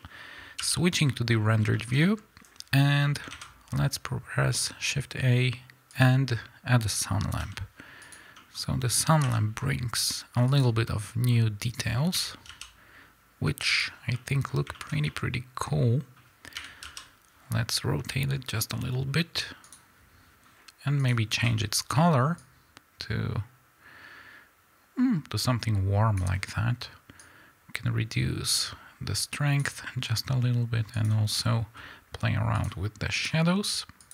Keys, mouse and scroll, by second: 0.5 n, 1.0-1.3 scroll up 1, 1.3 middle click, 1.6 shift+middle click, 1.9 middle click, 3.2 shift+a, 6.2 scroll down 1, 7.3 g, 8.1 click, 8.3-9.1 middle drag, 9.1 r, 10.5 click, 10.8-11.3 middle drag, 11.3-12.1 scroll up 2, 12.1 r, 13.7 click, 13.9 scroll down 2, 14.1-19.7 middle drag, 14.4-15.0 scroll up 2, 16.5 r, 19.7 click, 20.9 click, 27.1-31.0 drag, 32.5 click, 33.1 click, 33.9 click.